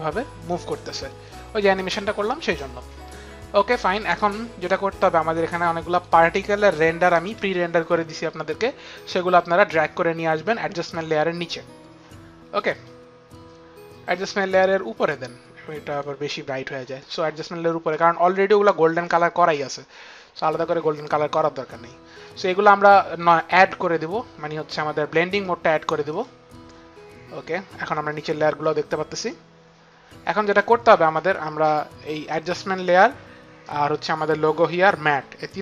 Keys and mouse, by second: 5.8 click, 8.8 click, 12.5 click, 15.0 click, 17.8 click, 23.2 click, 26.0 click, 29.2 click, 31.9 click.